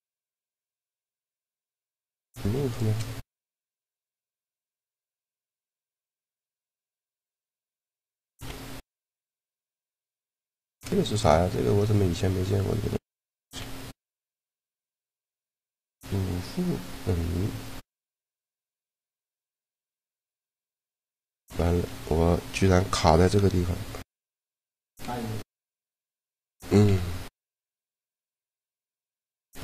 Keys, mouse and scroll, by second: 0.0-1.0 middle drag, 1.0 Tab, 2.9-4.1 right drag, 3.6 ctrl+g, 5.2-6.8 right drag, 6.1 shift+l, 8.2 shift+l, 9.9-12.8 right drag, 12.8 click, 12.9 middle click, 13.2 shift+l, 13.7 middle click, 19.4-22.1 right drag, 23.9 alt+d, 24.9 middle click, 26.5 shift+l, 28.4 right click.